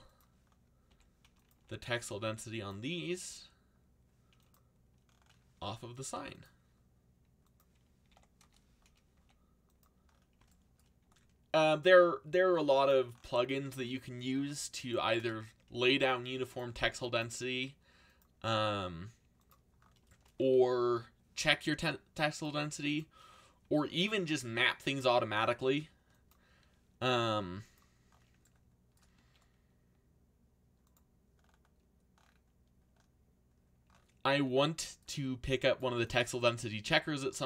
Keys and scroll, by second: 0.9 s, 1.5 g, 3.2 s, 6.0 r, 7.7-9.1 typing, 11.0 g, 15.3 a, 16.6 c, 22.6 g, 25.1 g, 27.0 s, 29.1 g.